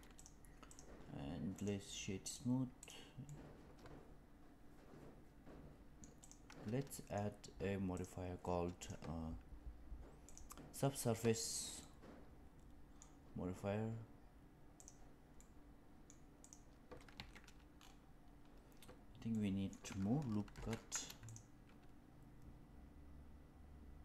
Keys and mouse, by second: 0.1 click, 0.6 click, 1.6 right click, 2.7 click, 3.2-5.9 middle drag, 6.1 click, 6.8 middle click, 8.9-10.4 drag, 11.8-12.9 middle drag, 15.3 middle click, 17.1 Tab, 19.3 middle click, 20.4 ctrl+r.